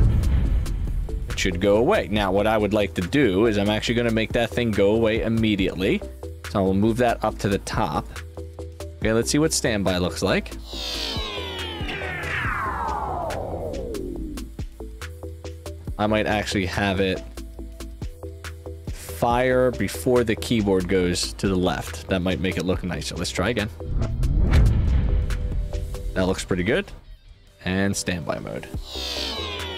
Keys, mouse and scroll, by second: 2.8 click, 3.0 click, 4.4 click, 4.9 click, 7.8 click.